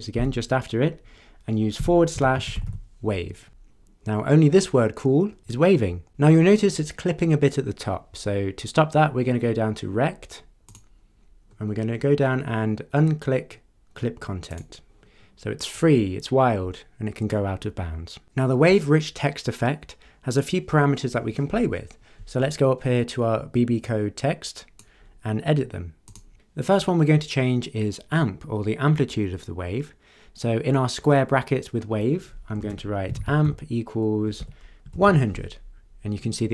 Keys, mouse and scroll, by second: 0.2 BackSpace, 1.5-3.1 typing, 10.6 click, 11.5-12.1 scroll down 4, 14.5 click, 23.9-25.0 drag, 26.1 click, 32.6-35.4 typing.